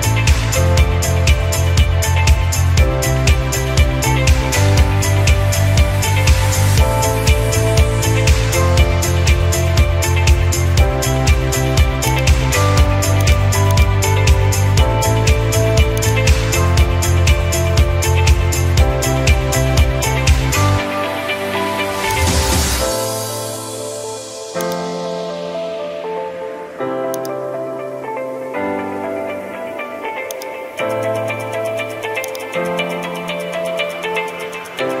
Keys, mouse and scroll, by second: 0.4-0.8 scroll, 2.4 middle click, 3.1-3.6 scroll, 4.9 middle click, 6.3-7.1 scroll down 2, 9.6 scroll down 1, 9.7-10.5 middle drag, 10.5 scroll down 2, 10.6 middle click, 11.5 middle click, 12.2 ctrl+click, 13.3 ctrl+click, 13.8 ctrl+click, 15.0 middle click, 16.2 ctrl+click, 16.7 middle click, 16.7 middle click, 17.3 middle click, 19.8 middle click, 22.2-23.3 drag, 24.7-25.9 drag, 27.3 click, 30.4-33.5 drag, 34.5 middle click.